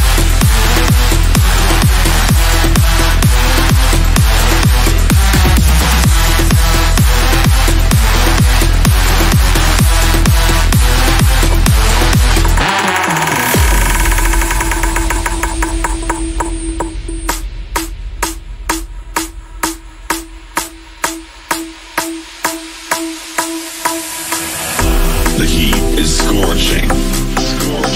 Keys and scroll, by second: 0.3 g, 23.6 F4, 24.5 Escape, 26.6 Delete.